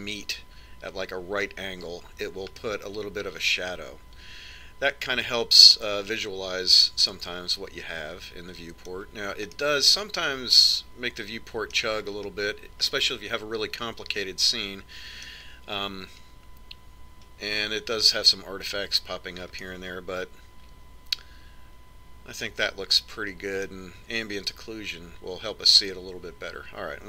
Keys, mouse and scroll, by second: 3.7-5.9 middle drag, 10.7-12.5 middle drag, 12.5 scroll up 1, 13.3-14.1 scroll down 1, 14.1-15.9 middle drag, 20.9-22.7 middle drag.